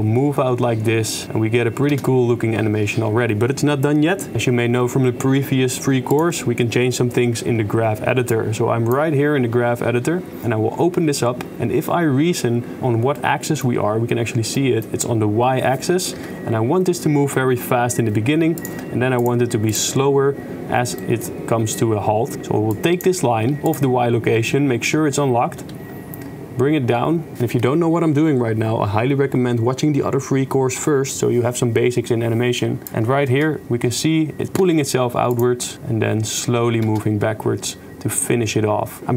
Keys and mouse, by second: 2.1 shift+space, 6.2-9.0 drag, 10.4 click, 13.2-13.7 middle drag, 13.9 middle click, 14.7 click, 16.2 KP_0, 18.6 click, 19.3 click, 21.2 middle click, 22.7 drag, 22.9 click, 23.7 click, 25.7 g, 33.3 shift+space, 34.7 shift+space, 35.4 click, 35.7 shift+space, 36.9 shift+space.